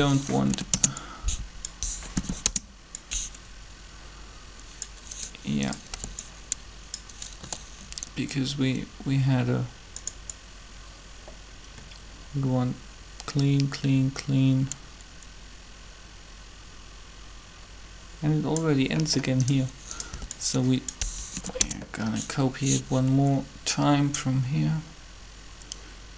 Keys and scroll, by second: 0.5 Delete, 0.7 Return, 2.1 Return, 2.4 Delete, 5.9 b, 7.4 g, 20.1 b, 21.6 Delete, 21.6 Return.